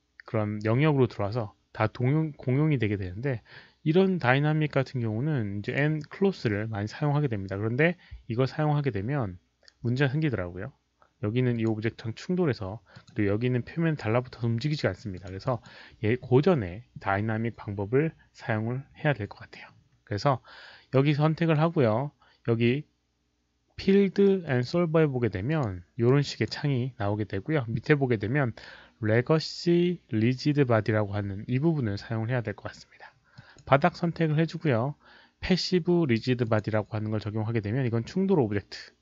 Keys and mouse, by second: 2.8 click, 5.6 click, 9.7 click, 11.5 click, 12.9 click, 15.1 click, 15.4 click, 24.4 click, 25.5 click, 26.0-26.4 drag, 33.3 drag, 36.4 click.